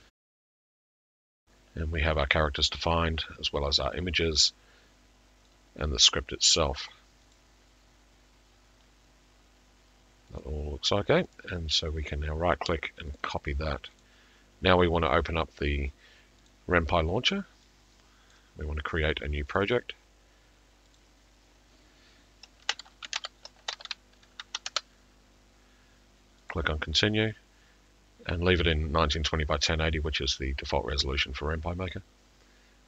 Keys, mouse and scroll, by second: 6.5 click, 7.4 click, 10.4 click, 11.4 right click, 13.2 right click, 16.5 click, 18.3 click, 19.6 click, 21.0 click, 22.9-23.7 typing, 26.3-27.0 typing, 26.5 click.